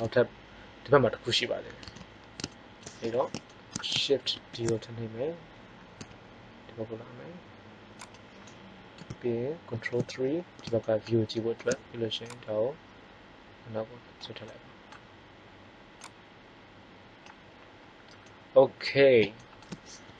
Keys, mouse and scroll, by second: 2.9 KP_1, 4.2 shift+d, 8.1-8.5 drag, 8.5-9.7 middle drag, 9.7 ctrl+KP_3, 12.1-12.5 drag, 15.9-17.8 drag, 17.8-18.1 middle drag.